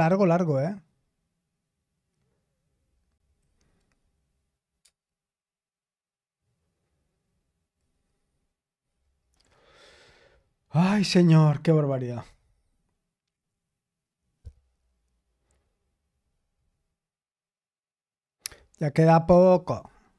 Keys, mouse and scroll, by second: 4.8 Return.